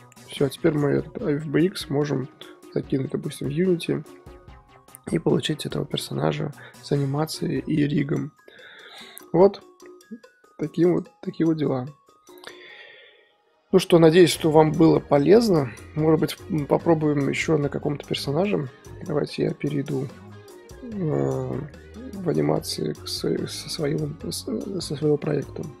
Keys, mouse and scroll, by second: 1.1-1.7 scroll down 5, 1.7-2.2 middle drag, 2.2-2.9 scroll up 3, 2.9-8.7 middle drag, 8.7-9.3 scroll down 2, 9.3-10.1 scroll down 1, 10.1-11.3 scroll down 1, 11.3-12.7 scroll down 1, 12.7-14.0 scroll down 1, 14.0-14.7 scroll down 1, 14.7-15.2 scroll down 1, 15.2 scroll down 1, 15.4-25.8 middle drag.